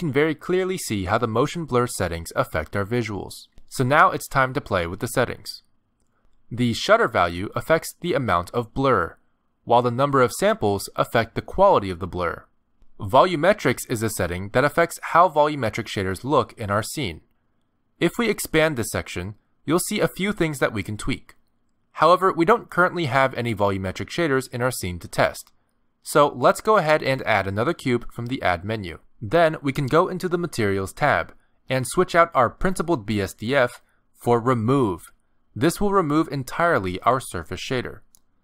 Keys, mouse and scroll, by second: 3.3 click, 3.7 click, 7.1 click, 9.4 click, 10.6 click, 12.2 click, 13.5 click, 14.2 click, 15.1 click, 15.9-16.5 scroll down 7, 16.5 click, 16.8-17.7 scroll down 3, 21.6 middle click, 22.3 scroll down 2, 22.7 middle click, 24.3 middle click, 25.1 shift+middle click, 25.9 scroll down 1, 26.1 middle click, 27.1 shift+a, 28.9 g, 31.1 click, 32.4 click, 33.3 click.